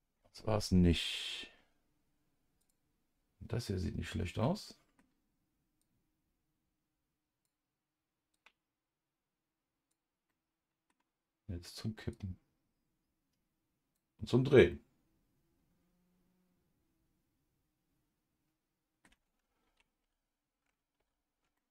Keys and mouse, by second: 4.4 middle click, 5.8 click, 8.3-9.9 drag, 10.3 middle click, 12.1 click, 12.6-13.9 drag, 14.7-19.0 middle drag, 19.6 ctrl+z, 20.0 ctrl+z, 21.4 ctrl+z, 21.6 middle click.